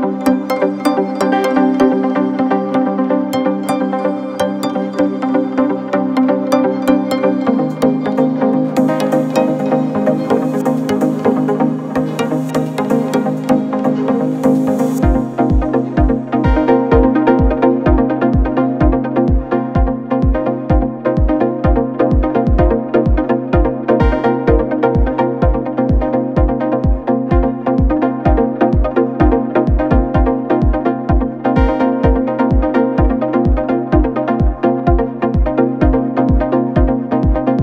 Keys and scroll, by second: 6.8 Return, 16.8 ctrl+c, 22.8 ctrl+=, 23.5 =, 24.9 ctrl+0, 28.7 ctrl+=, 32.0 ctrl+v, 33.5 ctrl+a, 37.2 l, 37.3 a.